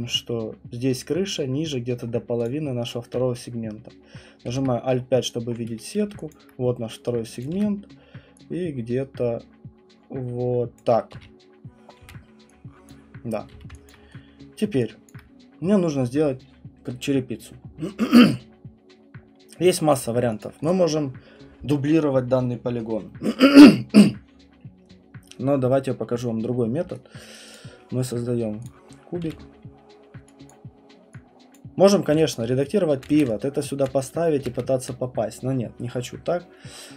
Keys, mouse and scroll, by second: 2.4 click, 4.5 alt+5, 5.0 middle click, 5.7 middle click, 5.7 right click, 6.3 alt+click, 7.4 click, 7.5 w, 10.8 click, 11.1-13.5 typing, 12.9 click, 13.9 alt+click, 14.6 right click, 15.1 alt+click, 17.9 middle click, 19.9 alt+click, 20.4 alt+click, 20.7 click, 27.3 right click, 27.5 click, 28.6 click, 28.9-30.5 scroll, 29.2 w, 30.5 click, 31.5 click, 31.8-32.5 scroll, 31.9-33.8 typing, 33.0 middle click, 33.1 click, 33.8 click, 34.5 ctrl+z.